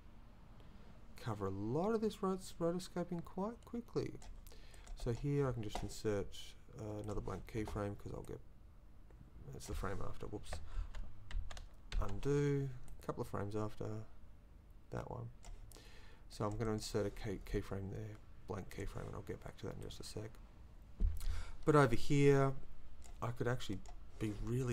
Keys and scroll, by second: 10.8 ctrl+z, 12.9 z.